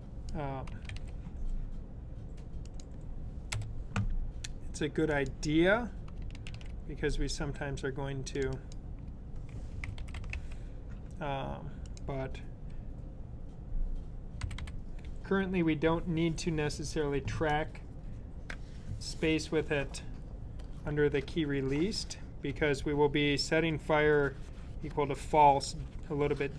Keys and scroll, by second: 0.7 super+c, 6.3 super+v, 9.3-10.7 typing, 14.2 typing.